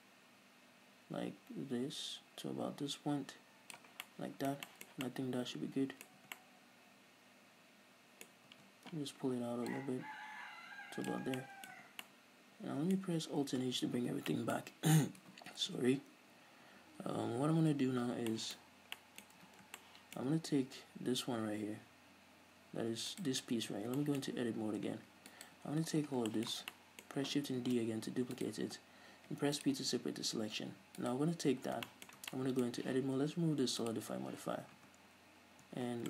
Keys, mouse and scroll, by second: 4.2 scroll down 2, 4.4 middle click, 4.7 shift+middle click, 5.4 middle click, 6.5 Tab, 6.7-8.7 middle drag, 8.6 scroll up 2, 8.9 Tab, 10.1-11.7 drag, 11.6 scroll down 2, 11.7-12.1 middle drag, 12.2 scroll down 2, 12.4-14.8 middle drag, 13.4-14.3 scroll up 2, 14.4 alt+h, 15.1-15.6 scroll up 2, 17.8 s, 18.6-19.2 shift+middle drag, 19.0 scroll up 2, 19.3-23.5 middle drag, 19.8 ctrl+s, 23.5 right click, 23.9 Tab, 24.3 shift+middle click, 24.6-25.7 scroll up 2, 25.0 middle click, 25.7 alt+right click, 26.0-26.6 scroll down 2, 26.6-27.6 shift+middle drag, 28.0 shift+d, 28.8 right click, 29.7 p, 30.4 Tab, 31.4 right click, 32.1 shift+scroll down 1, 32.2-32.5 shift+middle drag, 32.7-34.2 middle drag, 34.2-36.0 drag, 34.9 scroll up 2, 35.1 Tab.